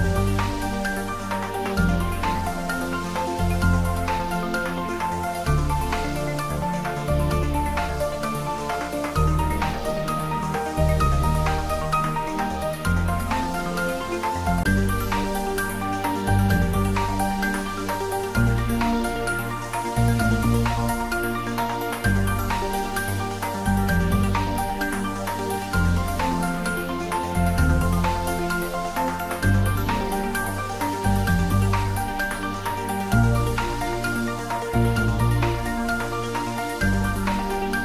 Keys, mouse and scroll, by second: 0.9 click, 1.4 ctrl+z, 2.2 e, 6.0 click, 6.6-9.3 middle drag, 9.3 click, 10.1 scroll up 1, 11.2 click, 12.6 shift+click, 14.0 2, 14.4 click, 16.6 g, 16.9 y, 19.2 click, 19.4-19.8 scroll down 1, 19.8 middle click, 20.2-20.7 scroll down 1, 21.9 3, 22.3 shift+click, 23.4-24.6 typing, 25.3 click, 25.7-27.6 middle drag, 27.6 scroll down 1, 28.1-30.1 middle drag, 30.1-31.0 scroll up 1.